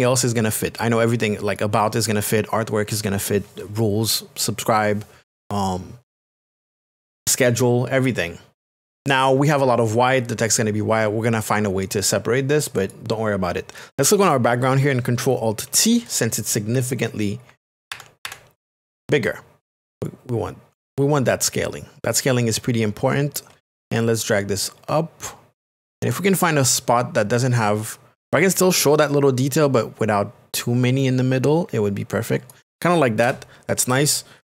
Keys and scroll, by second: 17.5 ctrl+KP_Subtract, 33.2 Return.